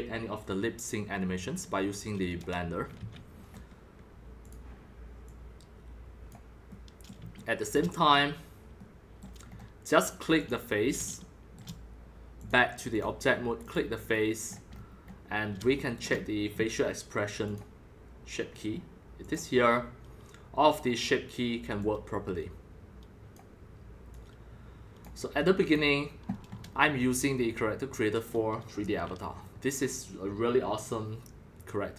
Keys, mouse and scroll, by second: 0.4-2.3 drag, 2.9 ctrl+z, 3.3-3.6 scroll, 4.4 middle click, 4.5-7.0 drag, 7.0-10.5 shift+middle drag, 10.5-11.5 drag, 11.0 shift+middle drag, 11.5 shift+middle click, 12.5-14.5 drag, 14.5 middle click, 14.9 scroll up 3, 15.0-17.5 middle drag, 17.5-20.7 drag, 21.8-25.1 drag, 25.6 click, 26.5 middle click, 26.6 middle click, 28.3-28.7 scroll up 4, 28.7-30.5 scroll down 5, 30.5-31.9 middle drag.